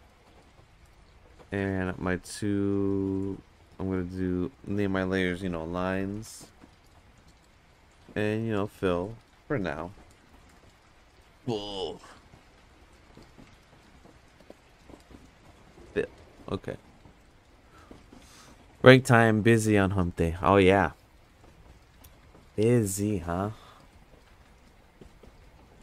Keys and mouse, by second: 3.2 click, 4.1 click, 4.3-7.7 drag, 8.0 click, 8.4 click, 8.6-12.9 drag, 10.4 l, 11.8 Return, 13.6 click, 13.8-25.8 drag, 15.6 l.